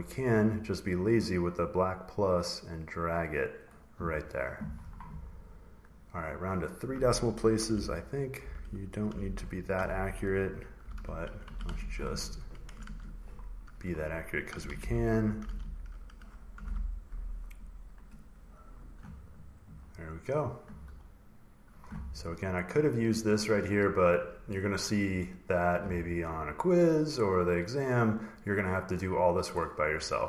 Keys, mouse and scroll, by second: 3.4 click, 5.1-5.5 drag, 5.8 click, 7.3-11.2 typing, 11.3 Tab, 11.5 Tab, 11.9 Tab, 12.7 Tab, 14.1-16.9 typing, 17.9 click, 19.7 scroll down 4, 21.0 scroll down 1, 21.0-21.7 scroll, 22.4 click, 22.7 click, 25.1 click, 28.1 click, 29.3 click, 30.1 click.